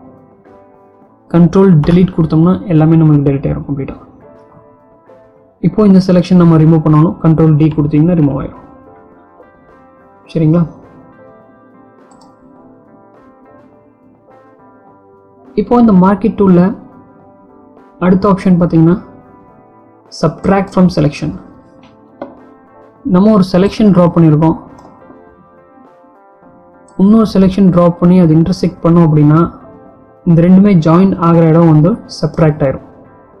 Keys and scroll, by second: 1.7 ctrl+Delete, 6.9 ctrl+d.